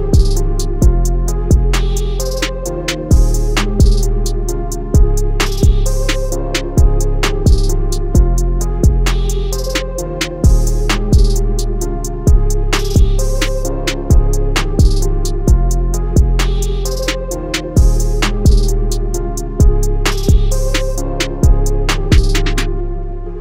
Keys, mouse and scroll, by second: 2.1 click, 3.5 shift+click, 4.0 click, 5.6-6.3 typing, 6.4 alt+shift+click, 7.4 click, 8.4 alt+click, 11.4 shift+click, 12.9 click, 15.2 shift+click, 16.5 Up, 17.1 Down, 17.9 click, 18.8 space, 19.5 click, 20.5 click, 20.9 click, 21.3 click, 22.6 click.